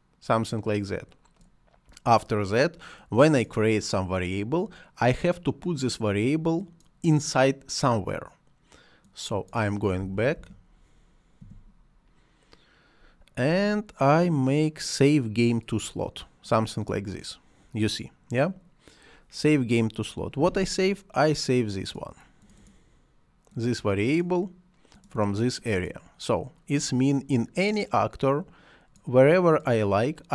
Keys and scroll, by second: 9.6-11.3 typing.